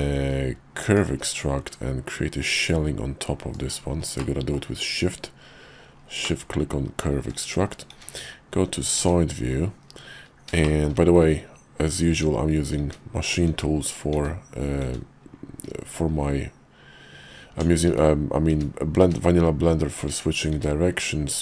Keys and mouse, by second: 4.2 middle click, 5.2 KP_5, 6.2 middle click, 7.2 `, 7.9 `, 9.0 `, 9.8 KP_5, 10.6 shift+click, 12.1-14.8 typing, 15.9 Tab, 18.1-20.5 typing.